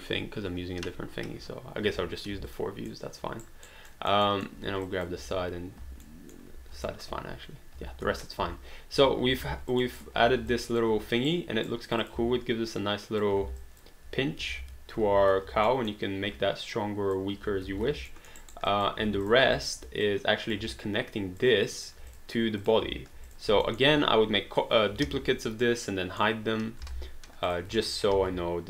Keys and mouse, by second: 1.9 space, 2.6 alt+middle click, 3.4 alt+right click, 4.1 alt+middle click, 4.9 click, 5.2 w, 6.0 alt+middle click, 6.9 alt+middle click, 8.4 space, 9.4 alt+d, 9.7 alt+click, 9.8 click, 10.5 alt+click, 11.3 right click, 11.9 click, 12.2 w, 12.8 click, 13.6 alt+d, 13.6 alt+click, 15.1 ctrl+z, 15.9 alt+middle click, 16.7 click, 17.7 ctrl+z, 18.1 alt+middle click, 18.4 alt+right click, 18.8 alt+click, 19.0 alt+d, 19.2 click, 19.6 alt+click, 20.0 click, 20.7 alt+click, 22.1 click, 23.3 click, 23.7 alt+middle click, 25.0 ctrl+d, 25.6 middle click, 26.8 h, 27.5 click, 28.1 ctrl+d.